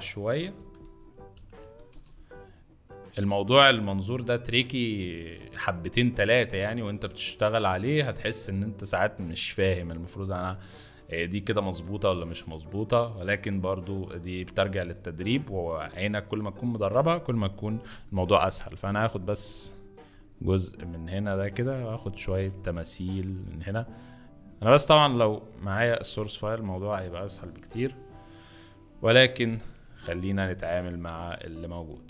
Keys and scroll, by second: 0.1 ctrl+z, 0.5 ctrl+d, 1.3 ctrl+c, 1.5 ctrl+v, 2.1 ctrl+shift+v, 3.4 ctrl+alt+shift+v, 18.0 s, 27.4 z, 29.3 s.